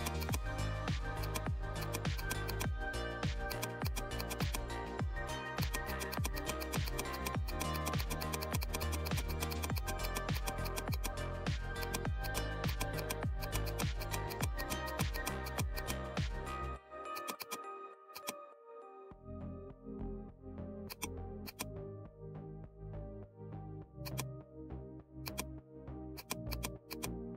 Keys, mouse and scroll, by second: 0.5 scroll up 1, 1.1 click, 2.7 scroll up 1, 3.5 click, 4.7 scroll down 1, 5.5-20.8 drag, 20.9 click, 22.5 ctrl+z, 23.2 right click, 24.0-27.3 drag.